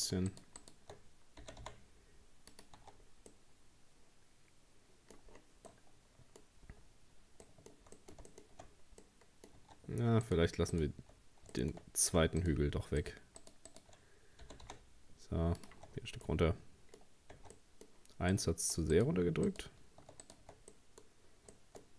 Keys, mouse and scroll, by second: 0.0 right click, 0.3 shift+right click, 0.6 shift+right click, 1.4 g, 2.8 Tab, 3.0-3.3 scroll down 3, 3.3-5.3 middle drag, 5.3-5.7 scroll down 5, 5.7 middle click, 6.4-7.5 scroll up 4, 7.5-8.7 middle drag, 8.7-9.0 scroll up 1, 9.0 middle click, 9.6 Tab, 10.3 right click, 10.7 shift+right click, 11.2-12.1 scroll up 4, 11.6 shift+middle click, 12.4 shift+right click, 13.0 shift+right click, 13.4 shift+right click, 13.7 shift+right click, 14.4 g, 15.8 Tab, 15.9 scroll down 1, 16.3 middle click, 17.0-17.4 scroll up 1, 17.4 Tab, 17.6 middle click, 18.3 right click, 19.0 shift+right click, 19.5 shift+right click, 20.2 right click, 20.7 middle click, 21.1-21.4 scroll up 2, 21.5 shift+middle click.